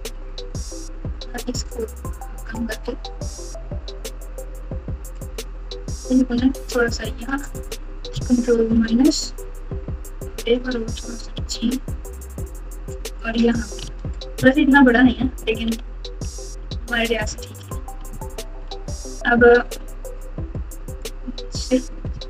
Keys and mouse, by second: 8.6 ctrl+KP_Subtract, 11.3 g, 13.5 click, 13.8 alt+z, 14.6-16.4 typing, 18.6 alt+z.